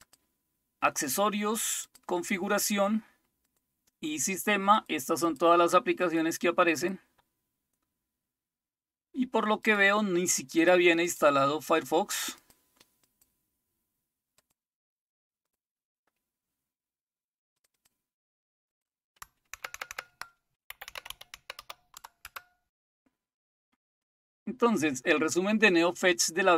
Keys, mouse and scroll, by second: 0.0 click, 1.8 click, 3.4 click, 4.7 click, 5.2 click, 6.0 click, 6.7 click, 7.3-8.1 scroll down 3, 8.1-9.6 scroll up 2, 9.6 click, 10.6 click, 12.3 click, 13.0 click, 13.5 click, 14.3 click, 15.4 click, 17.5 click, 17.7 click, 18.7 click, 19.7 ctrl++, 19.9 ctrl++, 20.5-22.1 typing, 22.2 Return, 24.6-25.5 scroll up 2.